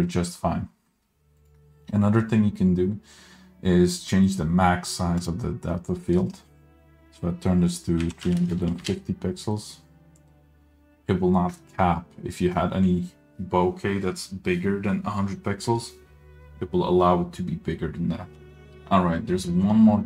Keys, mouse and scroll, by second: 5.4-9.0 drag.